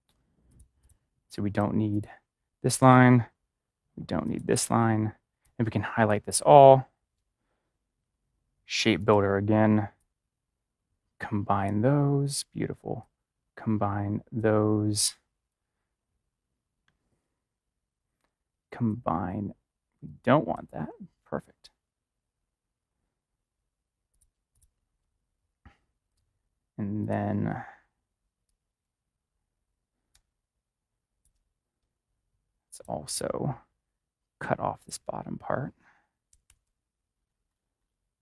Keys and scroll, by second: 2.7 ctrl+=, 2.8 BackSpace, 4.4 BackSpace, 36.2 ctrl+=.